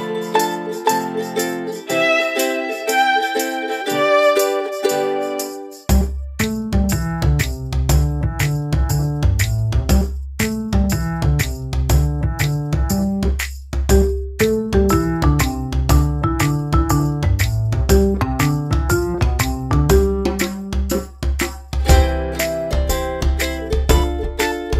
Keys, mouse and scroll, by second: 1.3 shift+click, 8.5 ctrl+a, 8.8 5, 9.3 Return, 10.1 click, 18.5 alt+click, 21.3 alt+click.